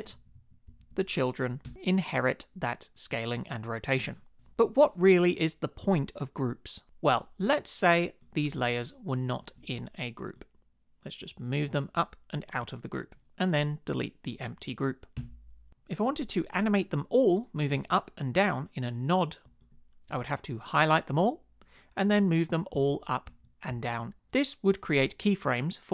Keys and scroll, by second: 0.1 shift+Down, 0.7 shift+Up, 1.6 Return, 15.2 BackSpace, 22.7 shift+Up, 23.3 shift+Down.